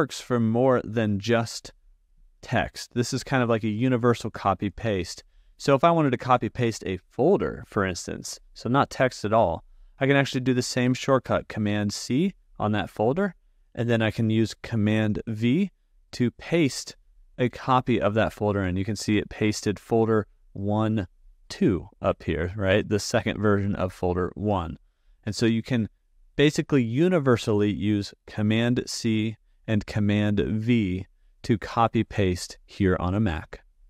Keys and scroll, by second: 11.8 super+c, 15.8 super+v.